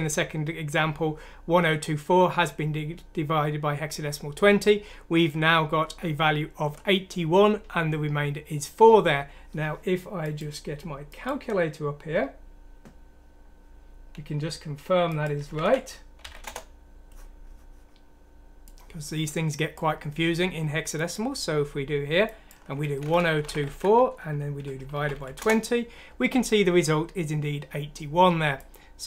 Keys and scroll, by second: 15.2-16.8 typing, 22.6-25.6 typing.